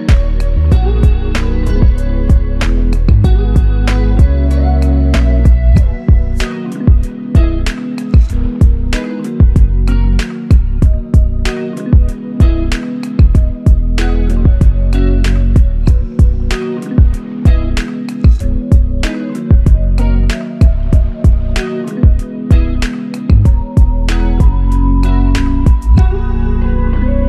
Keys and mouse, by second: 0.5 alt+click, 2.2 f, 3.4 double click, 6.0 alt+click, 7.9 double click, 10.3 ctrl+click, 12.0 shift+click, 19.3 ctrl+i.